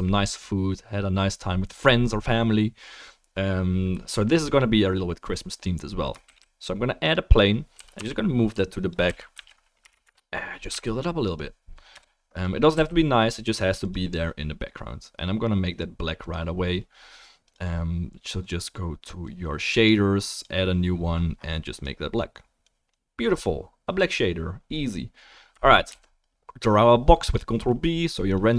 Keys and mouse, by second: 5.9-11.1 shift+drag, 6.2 shift+a, 7.7 g, 9.1 r, 10.7 s, 11.9 KP_0, 12.7 s, 13.8-15.4 drag, 21.8-23.9 drag, 25.9 ctrl+b, 28.1 click, 28.1-28.5 middle drag, 28.1-28.5 right drag.